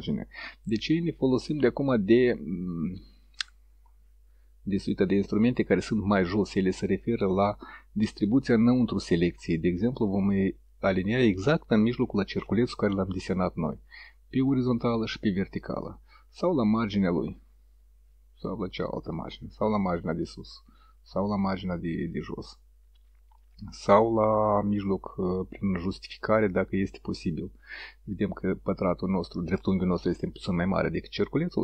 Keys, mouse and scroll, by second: 8.2 click, 10.2 click, 14.4 click, 15.2 click, 16.4 click, 18.8 click, 19.9 click, 22.1 click, 23.4 click, 24.9 click.